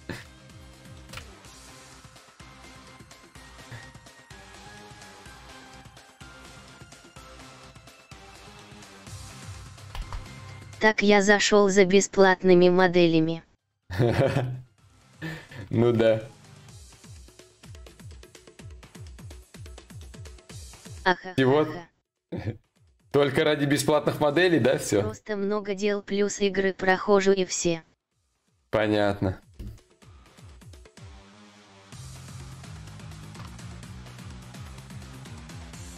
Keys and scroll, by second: 9.6 ctrl+z, 33.1 ctrl+s.